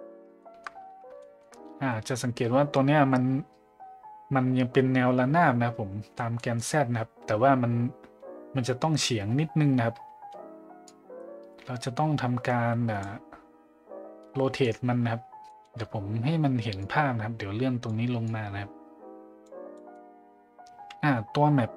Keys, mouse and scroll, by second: 0.4 shift+middle click, 1.2 shift+middle drag, 6.4 middle click, 10.8-13.0 drag, 14.7 click, 15.5 middle click, 16.8 click, 18.3 click, 19.8 middle click.